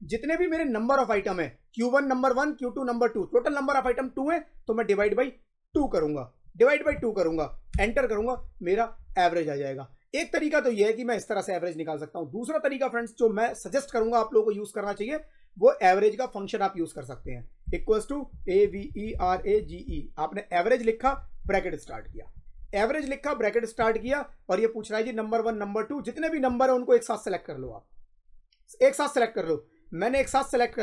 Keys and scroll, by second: 5.6 2, 7.6 Return, 8.0 Up, 17.5-19.7 typing, 21.3 shift+9.